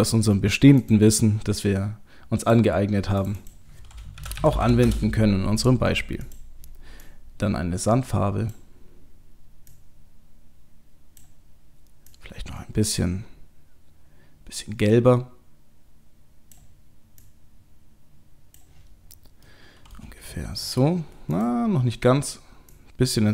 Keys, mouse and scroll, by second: 0.8 click, 2.4 click, 19.0-19.9 scroll down 3, 19.5 middle click, 19.9 middle click, 20.3 shift+middle click, 21.3 click.